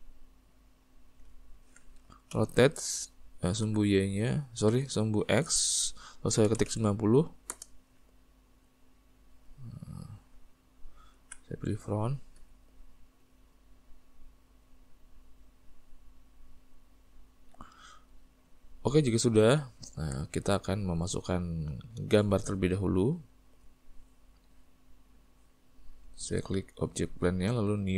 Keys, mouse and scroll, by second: 0.3 click, 1.0-2.4 middle drag, 2.4 r, 8.9 click, 9.9-10.5 middle drag, 12.5 s, 14.3 click, 16.4 click, 18.8-23.2 middle drag, 23.2 click, 26.2 click.